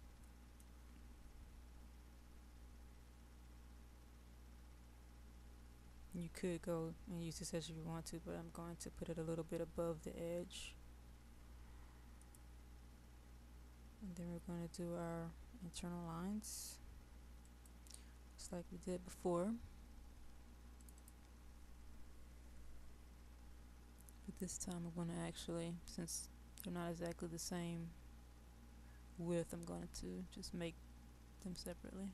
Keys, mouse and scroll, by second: 0.0 middle click, 12.2 click.